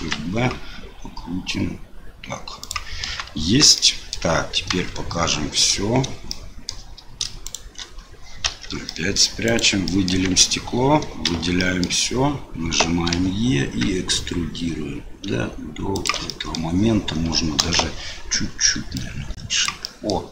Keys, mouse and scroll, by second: 3.4 Tab, 3.7 click, 4.8 KP_Divide, 6.3 click, 7.4 shift+click, 8.4 KP_Divide, 8.9 middle click, 9.5 click, 9.8 middle click, 10.2 Tab, 11.3 a, 11.6 click, 13.1 e, 16.4 middle click, 17.6 KP_1, 18.9 click, 19.9 middle click.